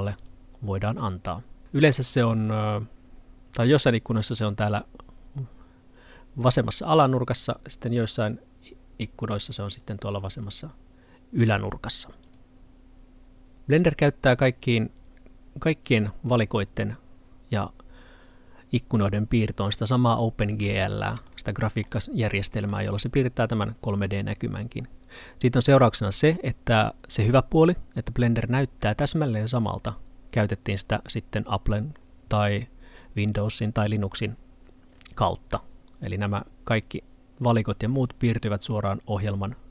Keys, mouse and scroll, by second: 9.1 click, 20.7 Pause, 20.7 middle click.